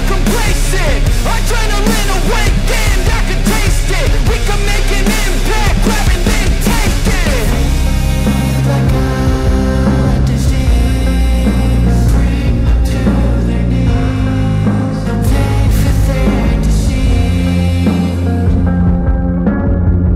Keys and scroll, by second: 3.1 ctrl+alt+z, 3.9 ctrl+alt+z, 15.3 space, 18.0 ctrl+alt+z.